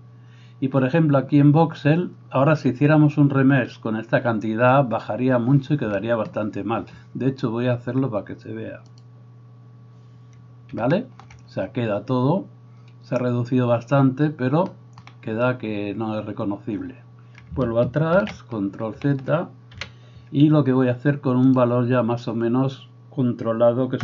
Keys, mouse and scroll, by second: 18.2 ctrl+z, 19.8 KP_1.